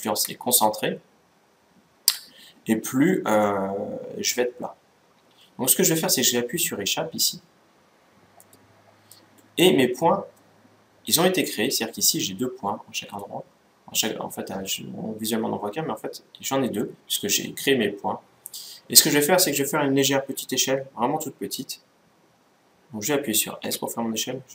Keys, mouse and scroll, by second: 8.0-11.4 middle drag, 11.4-11.9 scroll up 1, 11.9-13.1 scroll down 1, 13.1 middle click, 23.3 s.